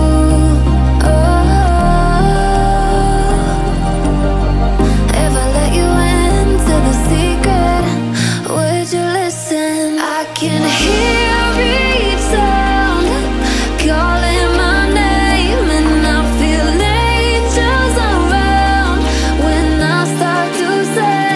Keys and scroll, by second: 8.1 ctrl+z.